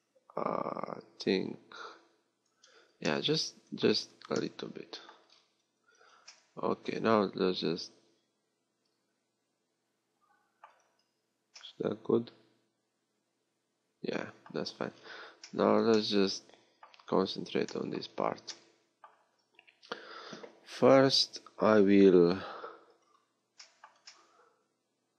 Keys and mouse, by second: 3.9 z, 5.9 Tab, 10.8 Tab, 11.5-14.0 middle drag, 14.5 Tab, 14.5 middle click, 15.8 middle click, 18.2 a, 21.1-24.2 middle drag.